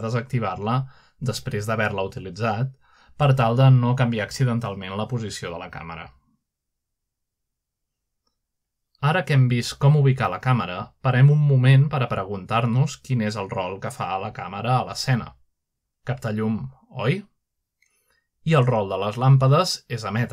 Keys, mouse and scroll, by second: 0.2-1.0 shift+middle drag, 0.4-1.8 scroll up 1, 1.3 shift+middle click, 2.3-3.2 middle drag, 2.3-3.2 scroll down 2, 3.6 shift+middle click, 4.5 middle drag, 5.1-5.9 middle drag, 5.3-6.2 scroll up 1, 6.1 shift+middle click, 7.8-8.4 middle drag, 8.0-8.6 scroll down 1, 9.0-9.7 shift+middle drag, 10.0 click, 11.0-11.7 scroll down 2, 15.4-16.4 middle drag, 15.6-16.6 scroll up 1, 19.6-20.3 middle drag.